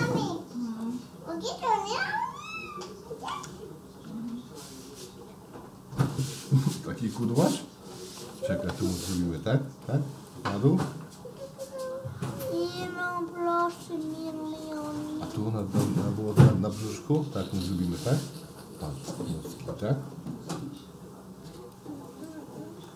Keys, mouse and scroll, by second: 3.7 Right, 4.4 Up, 4.9 Down, 5.2 Up, 5.6 Up, 6.1 Up, 6.1 Up, 6.9 Down, 7.2 Up, 7.7 Up, 7.9 Up, 8.0 Up, 8.3 Up, 8.5 Up, 8.7 Up, 9.0 Up, 9.2-9.9 drag, 9.4-13.8 Up, 10.1-12.8 drag, 13.8-14.8 middle drag, 14.9 Up, 15.4 Up, 15.5 Up, 15.6 Up, 15.6-16.8 middle drag, 17.0 Down, 17.2-17.6 drag, 17.7 Left, 17.9 Down, 17.9-18.2 drag, 18.4 Left, 18.5-18.8 drag, 18.9 Up, 19.1 drag, 19.5-22.8 Up, 19.6 drag, 20.1-20.8 drag, 21.6-22.9 drag, 22.8-22.9 middle drag.